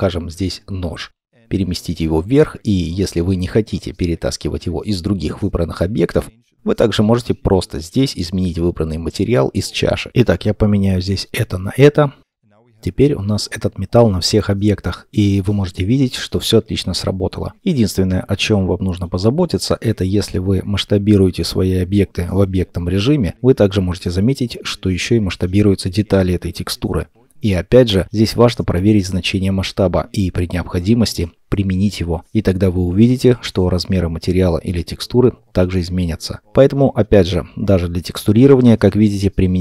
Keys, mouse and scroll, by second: 0.0 shift+scroll up 1, 1.1 shift+middle click, 12.0 middle click, 12.9-13.4 scroll down 2, 13.4 shift+middle click, 19.1-19.6 scroll down 1, 26.2-27.6 scroll down 1, 29.0 shift+middle click, 32.2-35.2 scroll up 1.